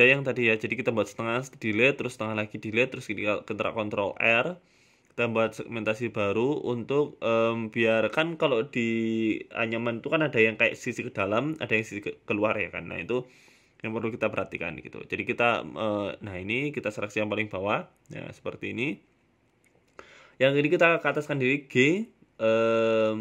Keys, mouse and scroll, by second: 0.1 ctrl+e, 1.0 ctrl+r, 3.5-3.9 scroll up 1, 3.9 middle click, 4.8 right click, 5.5 alt+shift+right click, 6.3 KP_3, 7.9 h, 8.3 ctrl+z, 8.5 g, 9.9 middle click, 10.5 middle click, 11.3 g, 12.7 right click, 13.2 alt+shift+Right, 13.7 middle click, 14.0 a, 14.1 a, 14.4 right click, 14.8 shift+right click, 15.7 g, 16.7 KP_3, 17.4 g, 19.1-19.7 scroll up 3, 20.1 click, 21.6 ctrl+r.